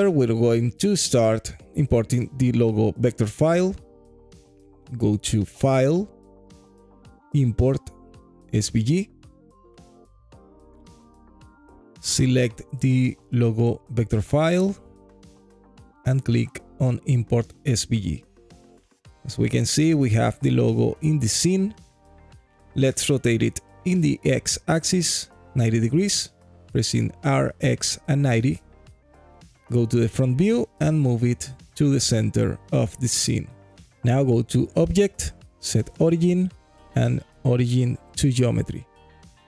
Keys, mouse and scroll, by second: 18.6-19.5 scroll up 8, 18.7 alt+click, 19.5 click, 20.4 alt+middle click, 21.2-22.9 alt+drag, 24.3 r, 25.1 x, 25.8 KP_9, 25.9 KP_0, 27.2 KP_Enter, 28.2 alt+click, 28.2 KP_1, 28.4 scroll down 2, 28.9-29.2 alt+middle drag, 30.0 g, 32.3 click, 32.3-33.8 scroll up 2.